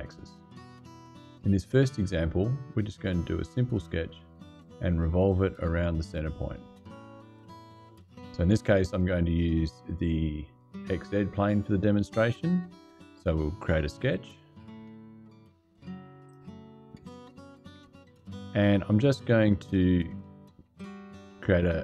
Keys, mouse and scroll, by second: 13.8 click, 16.0 click, 16.8 click, 19.4 click, 20.5 click.